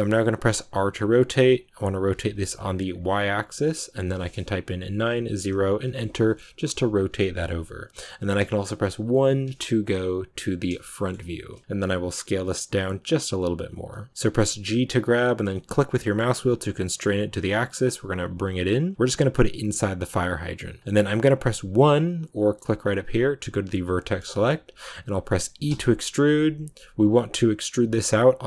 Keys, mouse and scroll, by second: 0.5 scroll up 1, 0.5 r, 12.2 s.